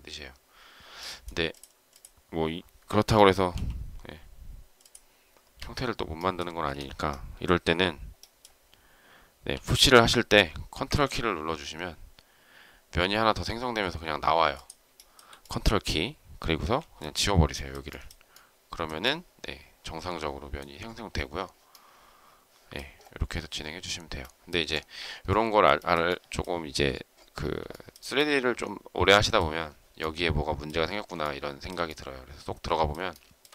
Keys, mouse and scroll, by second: 3.4 m, 5.5 Escape, 6.5 space, 14.9 shift+middle click, 16.5 e, 25.7 shift+middle click, 27.6 shift+middle click, 31.1 shift+middle click, 33.0 shift+middle click.